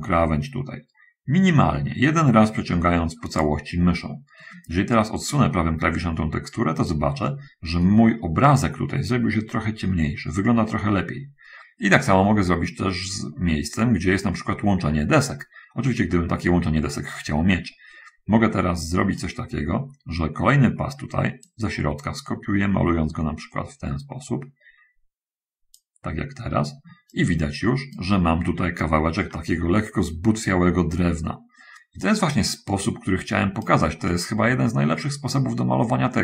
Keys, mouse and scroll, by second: 5.2-7.4 right drag, 12.4-19.7 right drag, 21.8-26.0 drag, 27.2-28.4 right drag, 32.4-34.1 right drag, 34.4-36.2 right drag.